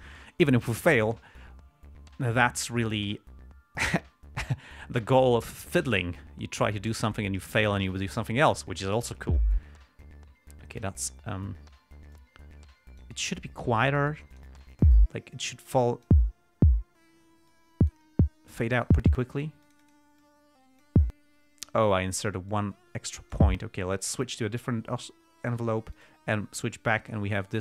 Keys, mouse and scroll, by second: 12.5-13.5 drag, 14.7 click, 15.7 click, 17.8-18.4 drag, 18.9-19.4 drag, 19.7 click, 20.6 click, 22.8-23.9 drag, 24.5 click, 26.3 click, 27.4-27.6 drag.